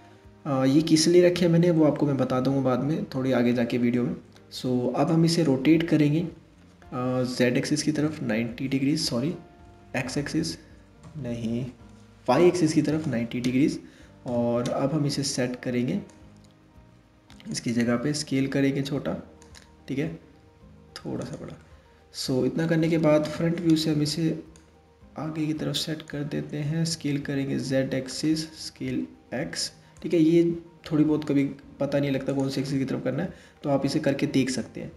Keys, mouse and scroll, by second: 5.7 r, 13.9 KP_3, 15.7 drag, 17.5 s, 20.0 s, 21.2-22.8 middle drag, 22.8 KP_1, 24.2 drag, 26.5 s, 28.0 s, 30.6 s, 32.2 scroll up 1, 32.3-34.9 middle drag.